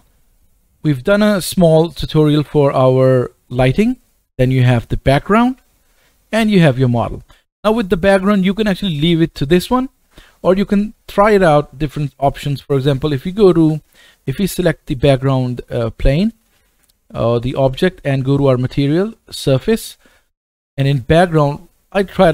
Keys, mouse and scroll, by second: 0.0-5.1 middle drag, 5.1 click, 5.3 middle click, 7.8-9.5 scroll down 1, 13.8 click, 14.6 click, 19.8-22.3 drag.